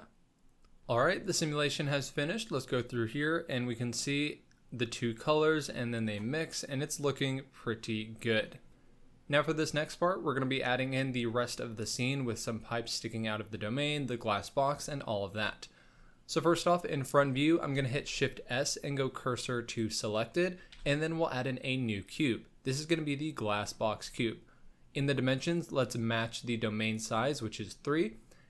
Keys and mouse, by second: 2.7-6.8 drag, 6.9-8.3 middle drag, 15.4 KP_1, 17.9 shift+s, 20.7 shift+a, 25.5-26.9 drag.